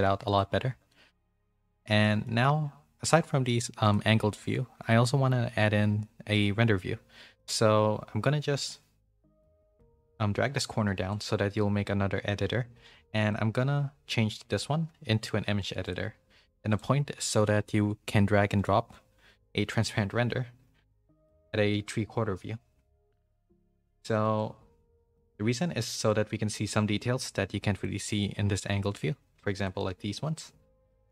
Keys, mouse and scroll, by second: 0.2 click, 0.9 shift+middle click, 1.3 middle click, 1.7 shift+middle click, 2.0 middle click, 3.8 click, 9.5-11.0 drag, 13.2-14.7 drag, 15.9 click, 21.9 middle click, 24.4 click, 26.0 middle click, 27.1 middle click, 28.1 click.